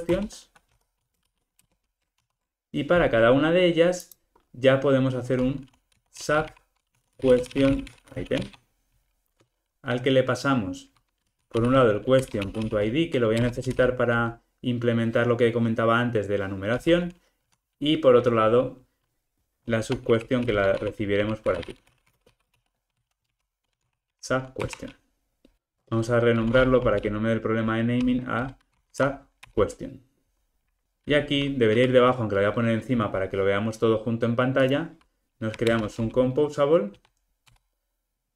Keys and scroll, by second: 0.1 Return, 2.2 alt+super+l, 12.3 Return, 24.7 Return, 25.5 super+z, 25.7 shift+F6, 35.6 alt+Return.